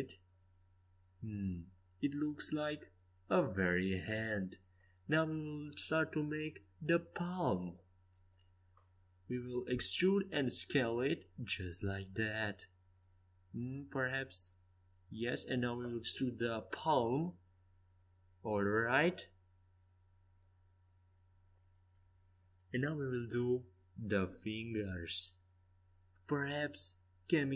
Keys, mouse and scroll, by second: 3.7 e, 4.7 s, 9.7 o, 10.9 s, 14.0 s, 15.9 e, 16.9 s, 17.7 e, 18.5 s.